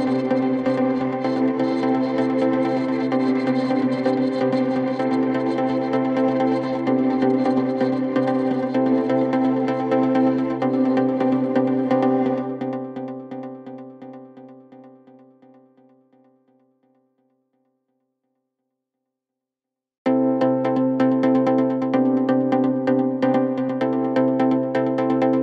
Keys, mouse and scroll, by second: 0.3 Return, 6.8 ctrl+t, 18.4 Return, 20.0 Return, 20.2-23.0 alt+drag.